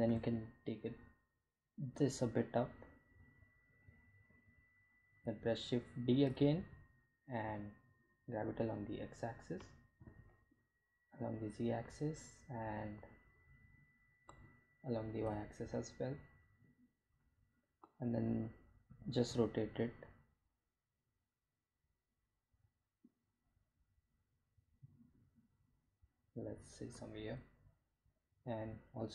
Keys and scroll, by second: 5.4 shift+d, 5.9 z, 7.0 x, 9.7 g, 11.0 z, 15.4 g, 15.6 y, 19.6 r, 20.1 z.